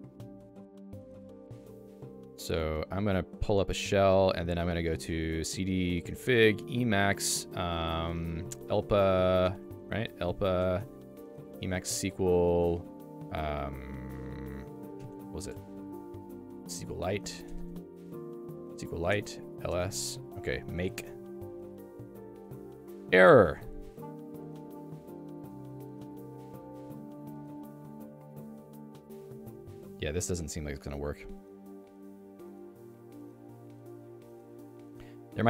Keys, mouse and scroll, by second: 2.2 click, 3.6 super+Return, 4.6-5.4 typing, 6.1 Tab, 8.5 e, 8.7 Tab, 9.2 Tab, 10.6 BackSpace, 10.7 p, 11.5 m, 11.9 Tab, 14.9 Tab, 16.8-21.1 typing, 19.1 Return.